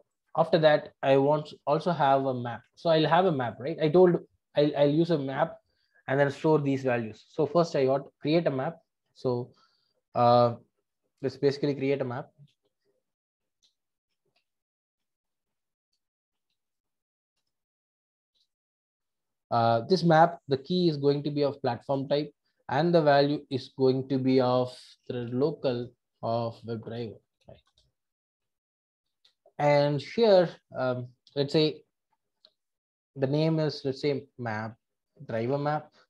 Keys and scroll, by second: 14.1 Return, 17.4 Return, 21.8 Return, 25.7 Return, 26.8 Return.